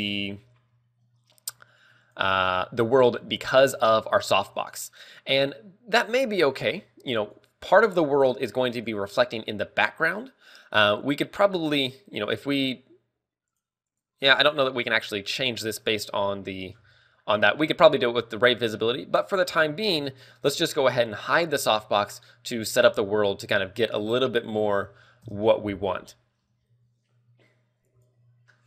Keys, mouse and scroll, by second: 2.2 click, 4.4 alt+h, 7.5 right click, 9.0 right click, 10.7 click, 12.4 click, 14.1 click, 14.6 click, 17.1 scroll down 4, 17.4 middle click, 17.6-18.3 scroll up 4, 18.0 shift+middle click, 19.2 scroll down 1, 19.6 middle click, 21.9 h, 25.6 KP_0.